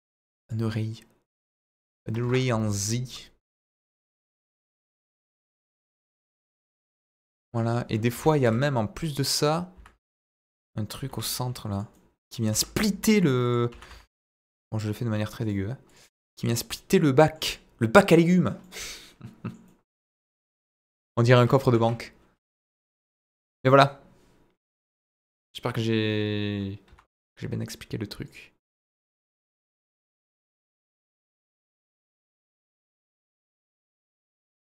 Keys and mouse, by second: 1.7 click, 3.0-4.2 drag, 5.0 click, 5.9-6.5 middle drag, 7.0-7.5 middle drag, 8.1 KP_1, 8.3 shift+a, 9.7 s, 10.4 click, 11.0 g, 11.1 middle click, 11.7 click, 11.9 middle click, 12.5 s, 12.5 middle click, 13.4 click, 13.6 s, 13.8 z, 15.4 click, 16.1-17.3 middle drag, 17.9 middle click, 18.6 middle click, 19.6 middle click, 20.2 middle click, 22.5 click, 23.0 r, 23.0 z, 26.8 Escape, 28.2 click, 29.2-34.7 drag.